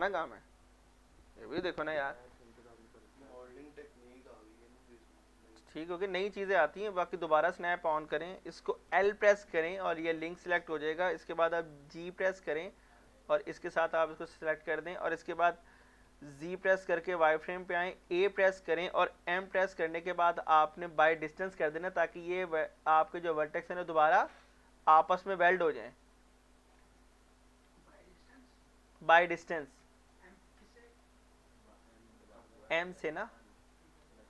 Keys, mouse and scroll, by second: 2.3 scroll down 1, 2.8 middle click, 3.2 shift+middle click, 7.0 click, 8.5 click, 9.0 l, 9.8 middle click, 10.1 shift+middle click, 12.0 g, 13.6 click, 14.1 middle click, 14.7-16.2 shift+middle drag, 16.2-17.8 typing, 18.4 scroll down 1, 19.4 m, 21.2 click, 21.7 scroll up 1, 25.6 Tab, 26.7 scroll down 1, 27.0 middle click, 27.2 z, 28.1 middle click, 28.3 scroll down 1, 28.7 middle click, 30.1 shift+middle click, 30.6 scroll down 1, 31.0-32.9 middle drag, 33.9 scroll down 1.